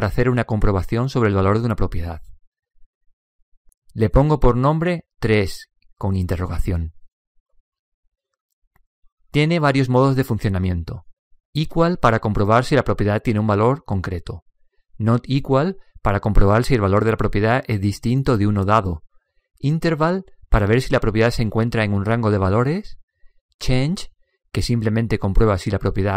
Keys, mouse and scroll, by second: 1.5-3.4 middle drag, 3.9 click, 11.8 click, 14.8 click, 16.5 click, 19.4 click, 23.7 click.